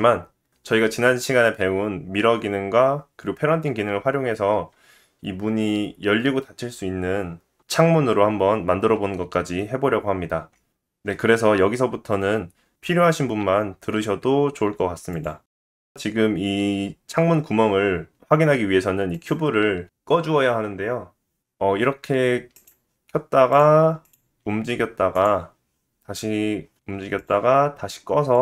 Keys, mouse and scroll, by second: 0.8 click, 2.0 middle click, 15.1 middle click, 15.1 scroll down 1, 16.6 middle click, 16.6 scroll down 1, 20.2 click, 22.5 click, 22.6 middle click, 23.2 click, 23.5 click, 23.8 g, 25.6 middle click, 25.8 KP_1, 26.3 g, 27.3 click.